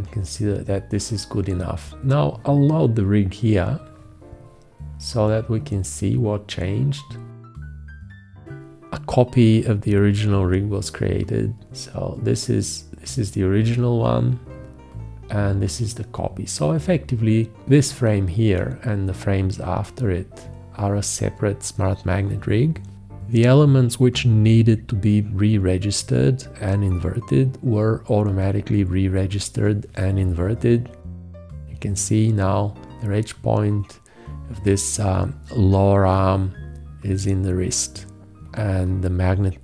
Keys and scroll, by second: 23.0 v, 24.7 q.